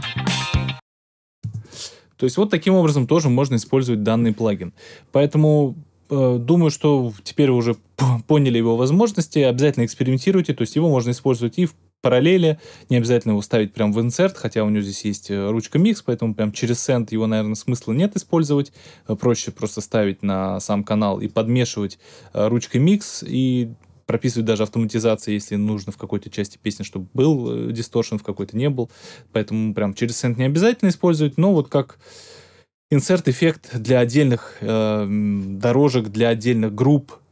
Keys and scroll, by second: 1.4 space.